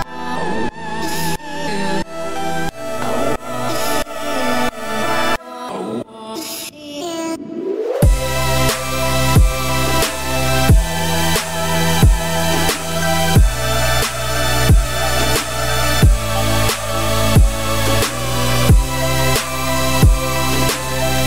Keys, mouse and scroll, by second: 1.5 scroll down 3, 1.6-3.6 middle drag, 3.6 click, 4.6 2, 4.9 click, 5.7 shift+d, 6.8 x, 8.8 click, 9.6 shift+s, 10.2 Tab, 10.7 Tab, 11.1 shift+a, 12.1 `, 12.9 `, 13.5 scroll up 1, 13.7 z, 14.1 shift+middle click, 14.3-14.7 scroll up 2, 14.7 s, 16.0 `, 16.5 z, 16.9-17.4 scroll up 2, 17.4 s, 19.4 `, 21.1 g.